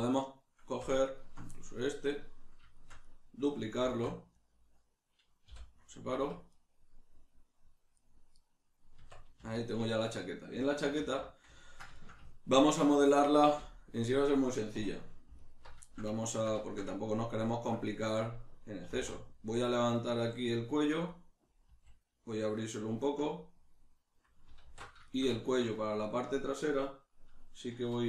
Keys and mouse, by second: 1.0 alt+shift+right click, 1.5-4.4 middle drag, 3.8 shift+d, 4.4 right click, 5.4 p, 6.5 right click, 7.9 right click, 8.3 right click, 9.0 Tab, 9.9-15.3 shift+middle drag, 11.0 alt+q, 14.7 2, 15.3 alt+right click, 15.9-21.1 ctrl+shift+middle drag, 18.9 e, 21.1 click, 21.7 s, 22.9 click, 23.1-25.1 middle drag, 24.6 alt+q.